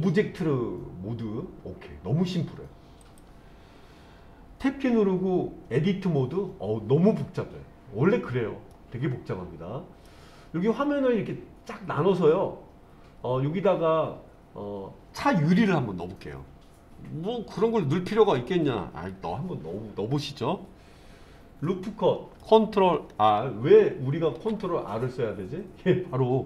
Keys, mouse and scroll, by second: 3.0 click, 4.9 Tab, 8.7-10.1 middle drag, 21.7-22.4 middle drag, 24.3 ctrl+r.